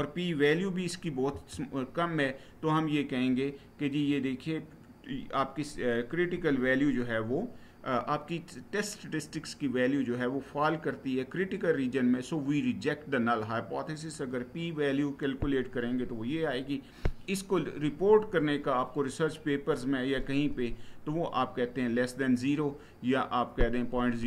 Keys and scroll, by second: 1.0 Right.